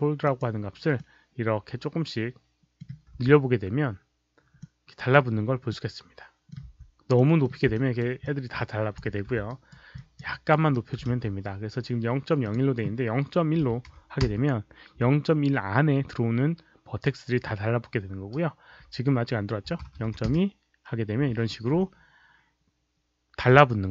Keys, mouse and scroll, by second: 0.1 click, 0.9-2.7 middle drag, 3.0 z, 4.5 middle click, 5.6 middle click, 6.5 z, 7.1 middle click, 7.7 alt+right click, 7.7 z, 8.1 alt+click, 9.4 alt+right click, 9.9 alt+click, 10.2 alt+right click, 10.6 alt+middle click, 12.3 click, 12.4 alt+middle click, 12.4 alt+right click, 12.4 z, 13.5 KP_Decimal, 13.8 KP_1, 14.2 Return, 19.6 KP_0, 20.0 KP_2, 20.2 Return, 21.2 KP_Decimal, 23.6 alt+click.